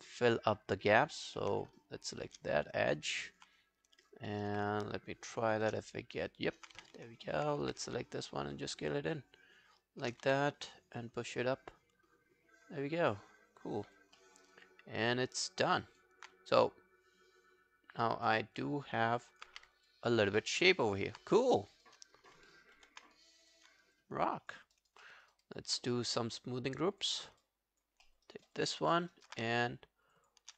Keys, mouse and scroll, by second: 0.4-0.7 alt+scroll down 1, 0.7 alt+click, 1.4 alt+middle click, 2.1 shift+click, 2.2 shift+click, 2.5 alt+scroll down 2, 2.8 alt+click, 3.2-3.6 alt+scroll up 1, 4.1 alt+click, 5.3 shift+click, 5.5 shift+click, 5.9 alt+click, 6.8 alt+w, 7.3 alt+middle click, 7.7 r, 8.3 shift+click, 10.3 w, 11.4 alt+scroll down 1, 11.7 alt+click, 14.2 alt+middle click, 14.4 alt+right click, 14.7 alt+click, 15.3 alt+right click, 15.6 alt+click, 15.9 alt+right click, 18.6 alt+click, 19.5 q, 19.7 scroll down 2, 19.9 alt+click, 20.4 alt+middle click, 20.6 alt+right click, 20.9 alt+click, 21.3 right click, 23.1 ctrl+scroll down 1, 24.0 alt+click, 24.8 alt+right click, 25.0 alt+middle click, 25.3 alt+right click, 25.5 alt+click, 25.9 right click, 27.3 scroll down 1, 27.4 alt+click, 28.1 alt+middle click, 28.3 alt+right click, 28.6 alt+click, 28.9 alt+middle click, 29.1 alt+right click, 30.2 shift+click.